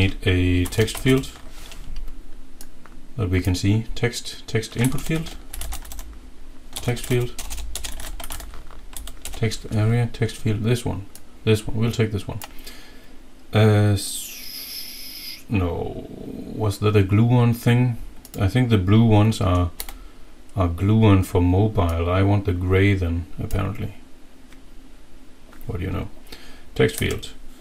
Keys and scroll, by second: 0.3-1.5 typing, 4.9-9.2 typing, 19.8 Delete, 27.0 F2.